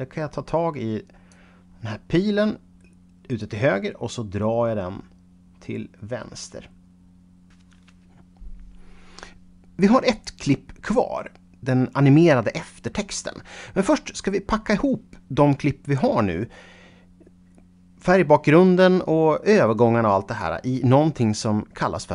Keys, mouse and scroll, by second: 1.6 scroll up 2, 3.4 click, 6.7 shift+right click.